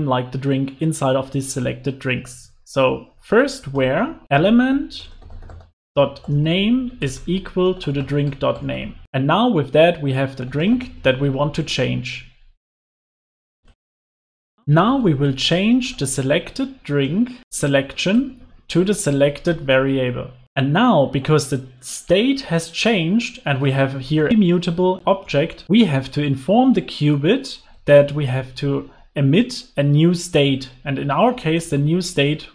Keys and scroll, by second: 4.2 Return, 12.5 alt+shift+Right, 12.6 Delete, 13.4 alt+BackSpace, 14.0 alt+shift+Left, 17.0 Return, 30.4 Escape.